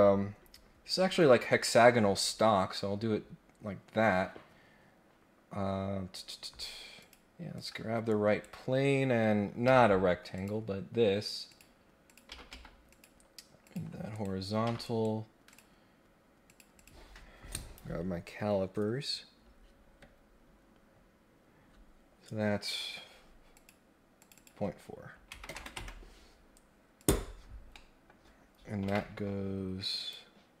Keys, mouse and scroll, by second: 7.0 click, 7.5 click, 8.0 right click, 9.6 Escape, 10.3 click, 11.5 click, 12.0 click, 12.3 Escape, 12.5 Escape, 12.9 click, 13.6 click, 14.1 right click, 14.6 Escape, 14.8 right click, 15.5 click, 16.4 click, 16.7 click, 23.5 click, 24.2 click, 24.3 click, 26.9 click, 27.7 middle click, 29.9 click.